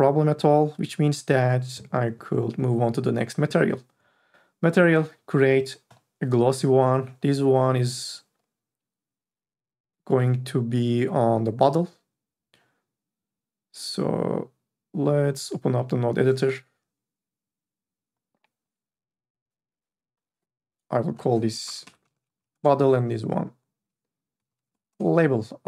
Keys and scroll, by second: 21.8 o, 22.1 t, 22.3 l, 22.4 e, 22.7 Return, 24.4 l, 24.6 a, 24.6 b, 24.9 Return.